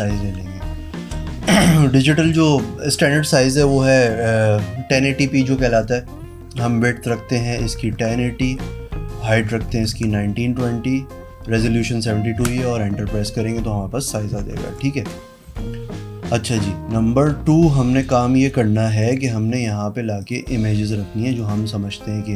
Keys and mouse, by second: 7.4 KP_1, 7.6 KP_0, 7.9 KP_0, 8.2 Tab, 9.4 KP_1, 9.5 KP_9, 9.7 KP_2, 9.9 KP_0, 12.3 KP_Enter, 14.3 z, 15.4 v, 17.9 click, 19.5 click, 20.2 click, 21.2 ctrl+click.